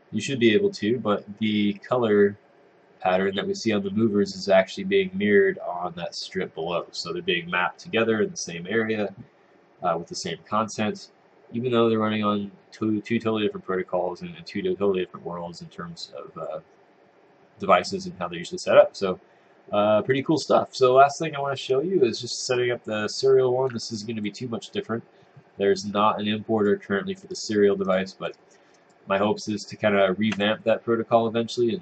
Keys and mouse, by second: 22.4 click, 24.0 click, 26.6 click, 27.3 right click, 27.9 click, 28.3 right click, 28.9 click.